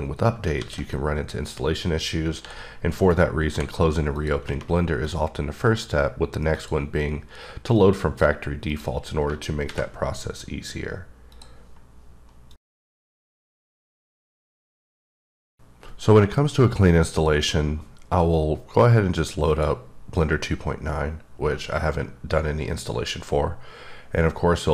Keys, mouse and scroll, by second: 0.3-0.7 scroll down 1, 0.8 alt+w, 1.2 click, 2.6 b, 3.7 g, 4.4 click, 5.3 click, 6.8 click, 8.0 click, 8.9 click, 9.9 alt+v, 11.5 click.